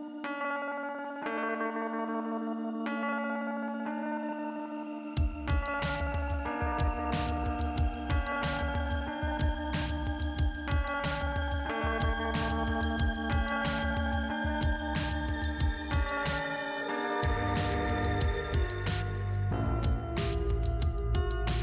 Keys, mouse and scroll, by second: 0.1 click, 1.7 click, 2.9 click, 4.7 click, 8.7 click, 10.5 click, 12.4 click, 14.1 click, 16.6 scroll down 1, 17.0 p, 17.3 scroll down 1, 20.6 alt+k.